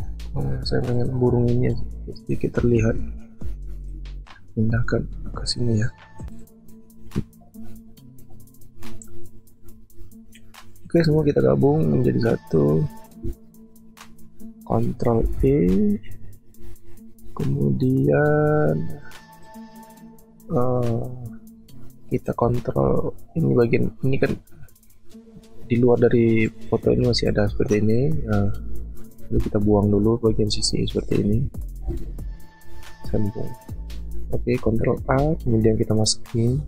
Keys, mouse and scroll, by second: 2.8 ctrl+z, 11.7 shift+click, 15.2 ctrl+e, 31.9 ctrl+z, 35.0 ctrl+a.